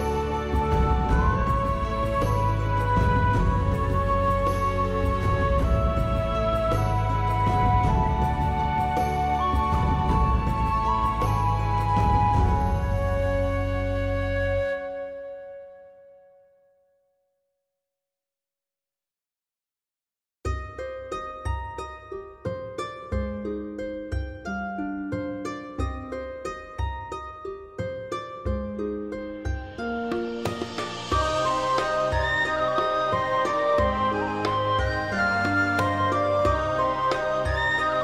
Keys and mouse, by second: 0.1 click, 0.5 g, 1.1 right click, 1.2 click, 1.4 g, 1.5 middle click, 2.0 click, 2.4 click, 2.5 g, 3.1 click, 3.5 middle click, 3.8 alt+middle click, 4.1 alt+middle click, 4.4 alt+z, 4.5 middle click, 5.2 click, 5.5 s, 5.6 middle click, 6.1 click, 6.4 g, 6.7 click, 7.0 alt+middle click, 7.7 shift+middle click, 8.0 alt+z, 8.4 click, 8.7 g, 8.7 middle click, 9.1 click, 9.4 ctrl+r, 10.2 right click, 10.5 click, 10.7 g, 11.1 click, 11.4 click, 11.5 g, 11.9 click, 12.0 middle click, 12.7 alt+z, 12.8 middle click, 13.0 middle click, 13.3 middle click, 13.7 alt+z, 14.0 middle click, 14.1 alt+z, 14.4 4, 14.5 click, 14.7 alt+middle click, 15.0 middle click, 15.3 3, 15.5 click, 15.6 alt+middle click, 15.7 alt+middle click, 15.9 g, 15.9 middle click, 16.3 right click, 16.7 middle click, 16.9 click, 17.1 middle click, 17.3 g, 17.6 click, 17.7 middle click, 18.1 middle click, 18.4 g, 18.4 middle click, 18.8 click, 19.0-20.1 middle drag, 20.2 click, 20.3 middle click, 20.8 middle click, 21.4 middle click, 21.6 middle click, 21.6 g, 22.3 click, 22.5 middle click, 22.9 click, 23.0 middle click, 23.3 middle click, 23.7-25.9 typing, 24.0 middle click, 24.6 click, 25.0 middle click, 25.7 middle click, 26.0 alt+middle click, 26.2 alt+middle click, 26.3 alt+z, 26.4 shift+middle click, 26.9 click, 27.3 click, 27.5 middle click, 27.5 g, 27.8 right click, 28.0 click, 28.2 g, 28.3 middle click, 28.7 click, 29.0 click, 29.0 g, 29.5 right click, 29.7 ctrl+z, 29.7 ctrl+z, 30.0 middle click, 30.4 alt+z, 30.4 middle click, 30.9 Tab, 31.0 middle click, 31.4 Tab, 31.8 middle click, 32.3 middle click, 32.5 g, 32.9 click, 33.1 middle click, 33.3 alt+middle click, 33.4 alt+middle click, 33.6 alt+z, 34.0 alt+middle click, 34.4 alt+click, 35.2 click, 35.7 shift+click, 35.9-38.0 typing, 36.6 click, 36.8 click, 37.4 click, 37.7 click.